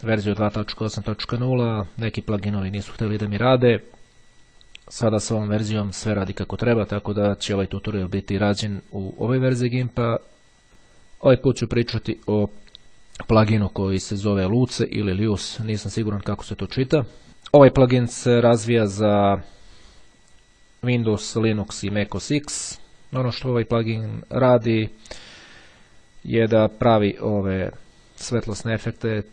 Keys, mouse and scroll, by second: 10.7 click, 12.5 click, 17.3-18.1 scroll up 1, 18.7-19.4 scroll down 1, 22.0-22.6 scroll up 2, 22.7-23.3 scroll down 2, 24.5-25.4 scroll down 2, 29.0-29.3 scroll down 2.